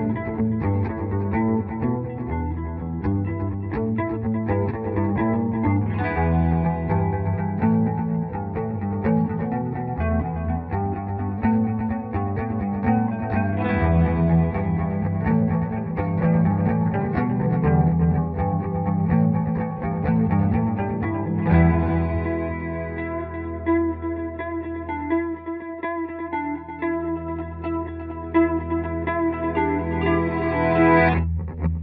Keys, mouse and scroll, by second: 5.6 Return, 7.6 F2, 7.6-9.2 drag, 9.2 right click, 10.3 click, 13.0 click, 13.2 right click, 14.4 click, 17.9 click, 19.5-20.4 typing, 21.0-22.8 drag, 22.8 F3, 22.9 Escape, 23.2 F4, 24.8-26.3 drag, 26.3 F2, 26.8-29.0 drag, 29.0 click, 29.9 ctrl+r, 31.7 click.